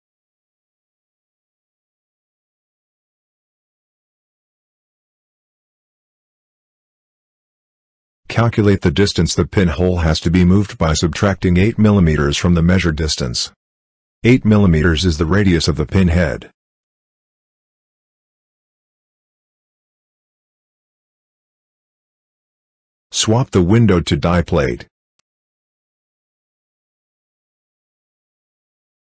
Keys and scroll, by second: 3.0-4.2 typing, 4.9 Return.